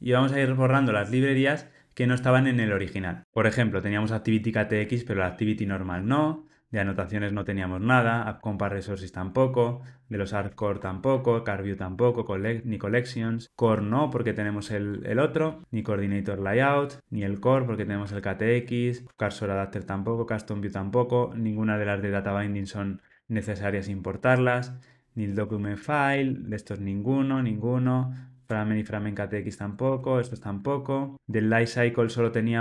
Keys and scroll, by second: 5.0 super+BackSpace, 26.0 super+BackSpace, 26.7 super+BackSpace, 27.2 super+BackSpace, 28.3 super+BackSpace, 29.7 super+BackSpace.